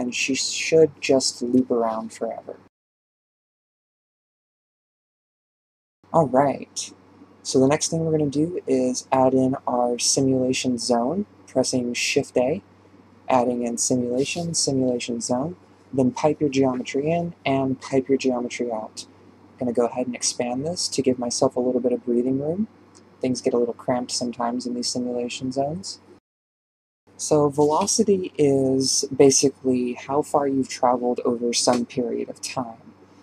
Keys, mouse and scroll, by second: 2.0 click, 3.4-5.7 drag, 5.7-6.2 scroll up 7, 6.2-7.4 middle drag, 7.4 click, 9.7 shift+space, 10.2 shift+Left, 13.9 shift+a, 15.4-16.0 drag, 16.6-17.4 drag, 17.6-18.0 scroll down 6, 18.0 click, 22.2-23.6 drag, 24.7 click, 28.2-33.2 drag.